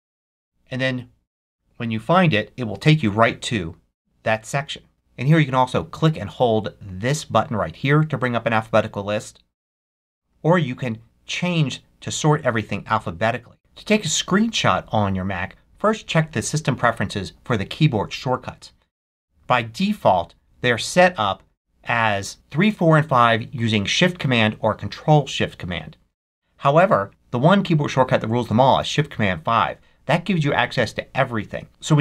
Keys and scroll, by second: 0.0-0.4 typing, 31.7 Escape.